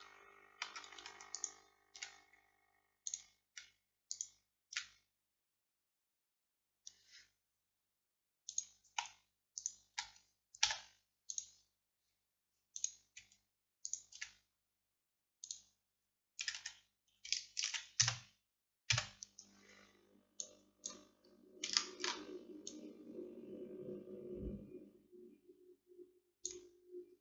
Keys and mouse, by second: 5.8-9.6 drag, 10.7-13.9 drag, 10.7 x, 16.5-17.7 drag, 16.5 a, 16.6 a, 17.7 shift+d, 19.0 KP_1, 20.5 click, 26.5 middle click.